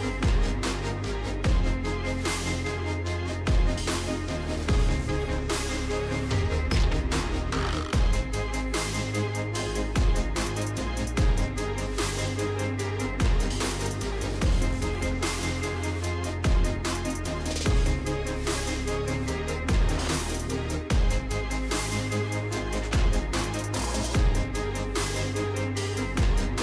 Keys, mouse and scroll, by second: 1.0 click, 2.7 ctrl+c, 3.2 ctrl+d, 5.1 click, 5.9-7.8 typing, 9.0 click, 10.1-11.6 typing, 13.9 click, 14.2 typing, 15.4-19.7 typing, 23.0 click, 23.5-25.0 typing.